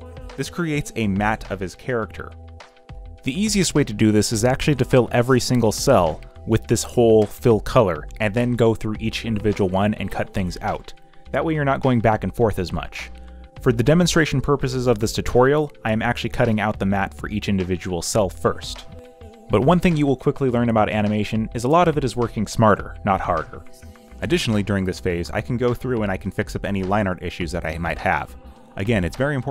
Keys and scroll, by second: 0.0-0.9 typing, 2.8 Delete, 7.5 alt+Delete, 8.2 w, 9.0 Delete, 9.3 Delete, 10.8 Delete, 13.9 Delete, 19.5 alt+Delete, 20.0 w, 20.9 Delete, 21.4 Delete, 22.3 Delete, 24.1 ctrl+d, 24.3 z, 24.8 q, 25.8 z, 26.8-29.5 typing.